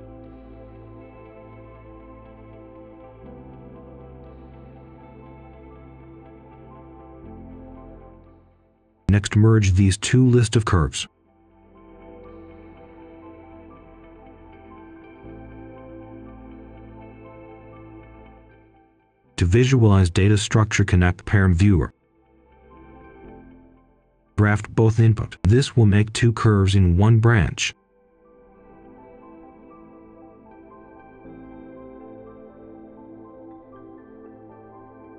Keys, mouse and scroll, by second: 0.0-0.4 scroll down 1, 0.5 right click, 0.9 click, 1.4 right click, 3.1 Delete, 4.0 click, 4.4 right click, 5.6-8.1 drag, 8.2 right click, 8.7 click, 9.2-10.4 typing, 11.6-16.9 drag, 16.9 middle click, 17.4 click, 17.8 right click, 18.8 click, 20.1 Return, 21.3 click, 23.8 right click, 24.5 click, 25.1 right click, 25.7 click, 27.6 ctrl+shift+h, 27.8 ctrl+right click, 29.1 ctrl+right click, 29.5 shift+right click, 30.2-35.1 drag.